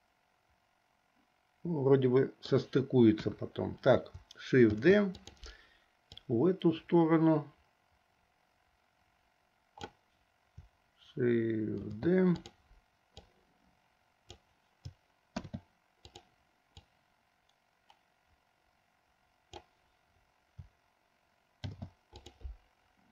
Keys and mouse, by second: 3.2 KP_1, 4.8 shift+d, 6.3-9.9 drag, 11.9 shift+d, 13.2-14.4 drag, 15.4 shift+d, 17.0-19.8 drag, 21.7 shift+d.